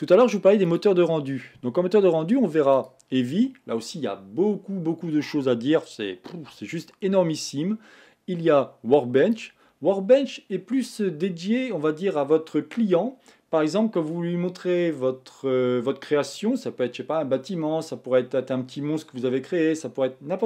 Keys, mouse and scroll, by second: 0.7 click, 2.7-5.8 drag.